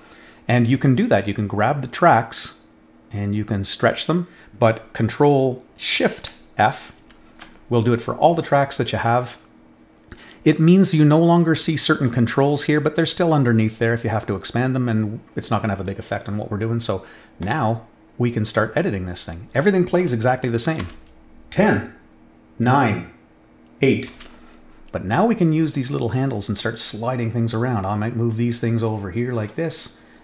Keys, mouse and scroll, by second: 1.5-4.5 drag, 11.3 click, 14.3-15.8 drag, 17.4 click, 24.1 space, 26.6 click, 28.4 click.